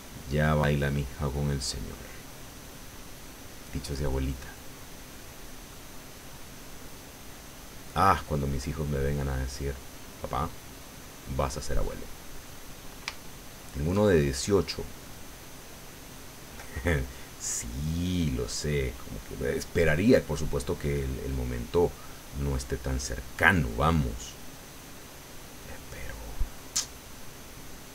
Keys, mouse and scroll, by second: 0.8-1.8 drag, 2.1-5.4 drag, 5.4 middle click, 6.1-7.3 drag, 7.3 middle click, 8.1-13.1 drag, 13.2 shift+middle click, 14.6-18.8 drag, 19.5-20.8 drag, 20.9 middle click, 22.0 middle click, 23.2-24.4 drag, 24.6 middle click, 25.7-27.0 drag.